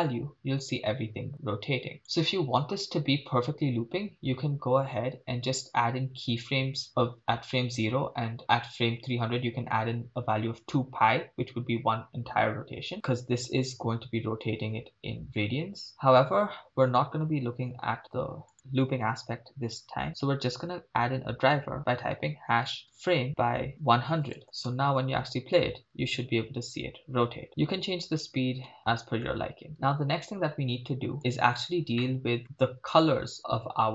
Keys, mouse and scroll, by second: 12.9-15.9 shift+drag, 18.5-24.4 drag, 23.9 0, 24.8 shift+space, 27.5 middle click, 28.7 shift+space, 28.8-29.2 middle drag, 29.3-29.7 scroll up 2, 29.7 shift+middle click, 30.3-31.1 scroll down 2, 31.2 click, 32.1-32.4 shift+middle drag.